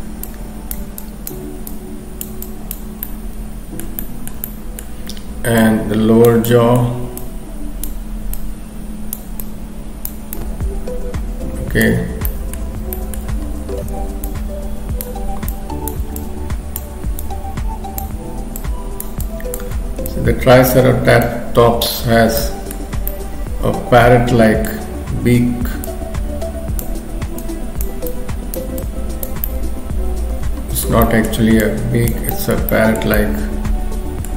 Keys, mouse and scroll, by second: 0.3 click, 1.0 click, 2.4 click, 3.0 middle click, 3.8 scroll up 1, 4.0 shift+middle click, 4.4 middle click, 5.6 click, 6.4 middle click, 7.2 click, 8.4 click, 9.4 click, 10.4 click, 12.0-12.6 scroll down 3, 12.3 middle click, 12.7 scroll up 2, 13.0 shift+middle click, 13.3-14.2 scroll up 2, 14.3 click, 15.5 shift+click, 16.2 click, 17.2 click, 18.6 shift+click, 19.0 shift+click, 19.2 click, 20.1 click, 21.2 click, 22.4 middle click, 22.9-23.5 scroll down 4, 23.1 middle click, 24.8-25.2 scroll up 2, 25.9 click, 27.4 click, 29.4 middle click, 31.7 click, 32.3 middle click, 32.7 shift+middle click, 33.2 middle click.